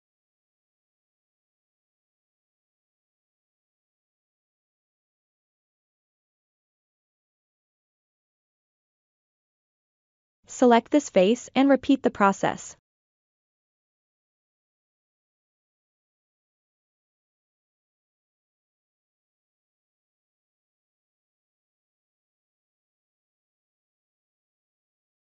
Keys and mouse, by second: 0.8 ctrl+middle click, 1.5 shift+middle click, 2.2 middle click, 4.7 KP_3, 5.6-9.1 drag, 9.7 3, 9.8 click, 10.4 middle click, 14.0 e, 15.6 middle click, 16.5 KP_3, 16.9 click, 17.2 click, 17.5 click, 17.5 r, 17.9 middle click, 18.2 KP_1, 18.5 g, 18.6 click, 19.1 alt+z, 19.4 alt+z, 19.7 middle click, 20.0 s, 20.1 click, 20.6 KP_Enter, 20.6 g, 20.7 click, 20.9 KP_3, 21.2 click, 21.9 click, 22.7 middle click, 23.0 i, 23.6 KP_1, 23.9 KP_3, 24.7 ctrl+KP_Add, 25.0 click.